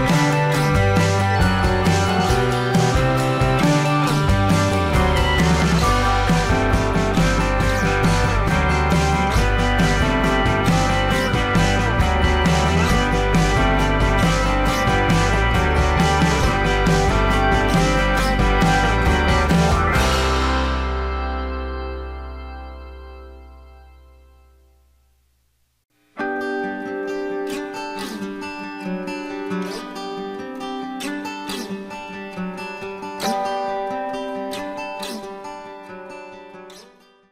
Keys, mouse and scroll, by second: 0.0-1.4 alt+scroll up 1, 10.7 alt+shift+click, 15.5 alt+scroll up 1, 15.8 space.